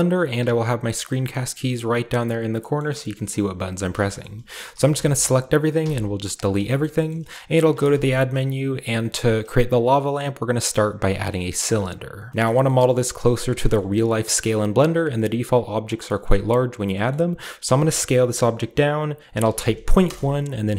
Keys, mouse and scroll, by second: 0.4 g, 1.0-2.2 right drag, 2.8 shift+middle drag, 3.0 shift+middle click, 3.2-4.0 shift+middle drag, 4.2-5.8 typing, 4.2-5.8 shift+middle drag, 6.3-6.7 shift+drag, 7.7 typing, 11.6 click, 12.3 ctrl+b, 12.6 ctrl+shift+middle click, 12.6-13.5 ctrl+shift+scroll up 1, 13.5-14.5 shift+scroll up 1, 13.7-16.0 shift+middle drag, 14.5-15.6 shift+scroll up 1, 16.2 middle click, 17.1-18.6 middle drag, 17.7 s, 19.4 typing, 20.0 Return.